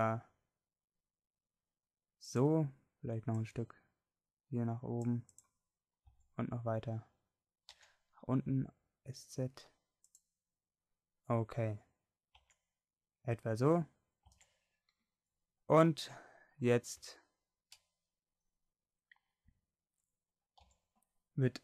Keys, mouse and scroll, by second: 6.2 s, 12.4 Tab, 14.3 Tab, 20.7 a.